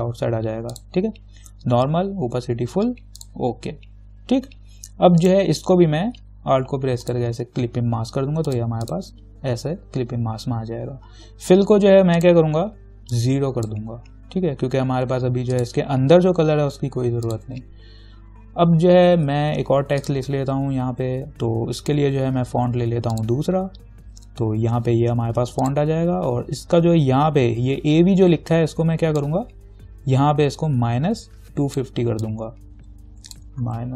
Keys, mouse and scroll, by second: 0.9 click, 3.4 click, 7.3 alt+click, 8.7 click, 12.4-15.8 drag, 19.4 t, 20.2 click, 25.8 click, 29.4-33.9 drag.